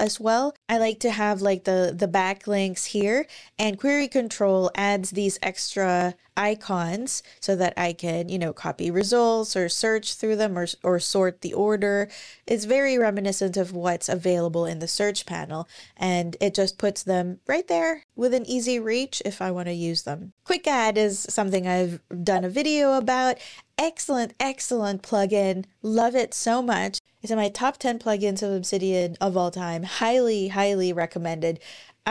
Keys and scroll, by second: 15.4 super+,.